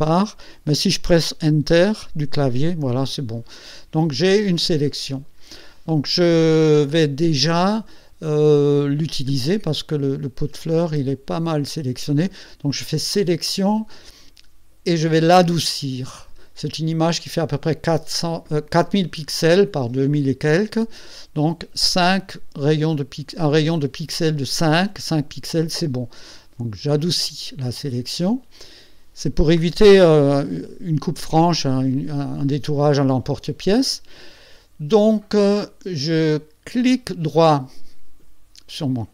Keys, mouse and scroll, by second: 1.6 Return, 3.2-3.9 ctrl+scroll down 2, 4.7 click, 13.1 click, 15.4 click, 26.6 click, 36.8 right click.